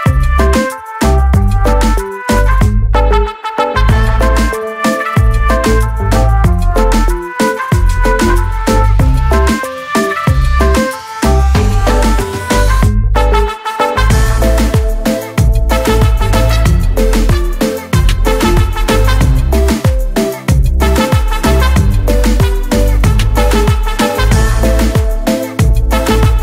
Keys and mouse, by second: 2.3 click, 3.6 click, 5.5 click, 6.5 ctrl+a, 7.4 ctrl+c, 7.8 ctrl+c, 8.7 ctrl+c, 8.8 click, 9.5 ctrl+a, 10.4 ctrl+v, 11.6 ctrl+v, 11.7 click, 12.4 click, 19.6 click, 23.2 click, 25.2 click.